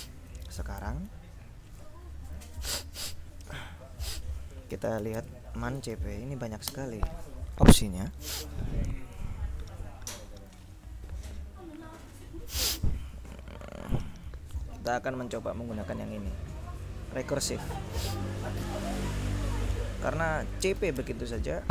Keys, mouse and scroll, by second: 0.9 ctrl+l, 4.5-6.5 typing, 6.8 Return, 7.9 Down, 9.7 Down, 11.2 Down, 16.9-18.8 drag, 18.9 q, 20.4-21.7 typing.